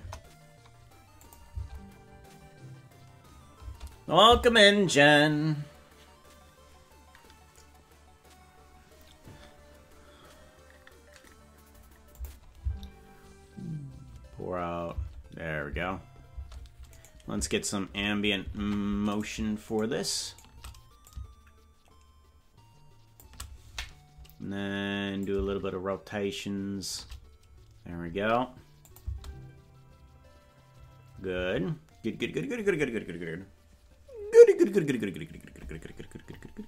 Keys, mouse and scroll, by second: 1.2 click, 1.5 space, 3.7 space, 12.1 click, 15.0 space, 16.4 space, 17.0 right click, 18.6 ctrl+Tab, 19.2 right click, 19.7-21.0 shift+right drag, 21.0-23.2 drag, 25.1-26.9 drag, 28.9 click, 29.1 space, 31.4 space.